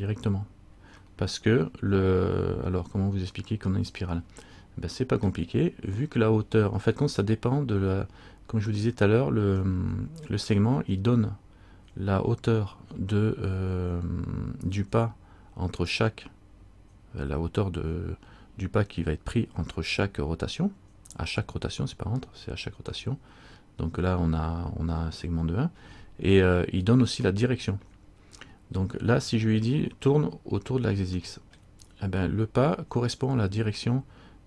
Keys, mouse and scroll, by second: 1.2 middle click, 9.9 middle click, 28.7 middle click, 31.4 middle click.